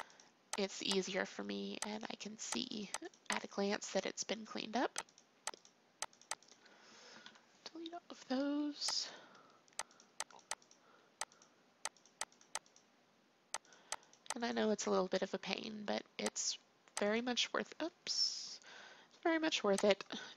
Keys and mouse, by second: 7.2 Delete, 9.0-10.4 drag, 10.7-18.7 drag, 19.8-20.3 drag.